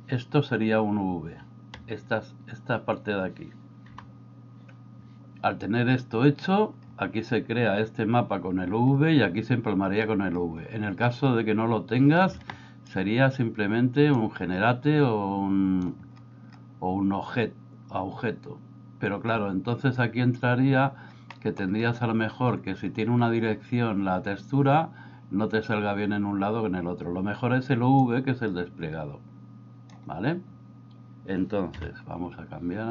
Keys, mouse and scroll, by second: 1.7 a, 4.0 g, 12.7 ctrl+right click, 14.2-15.9 drag, 21.3 middle click, 28.1-30.0 drag, 31.8 a.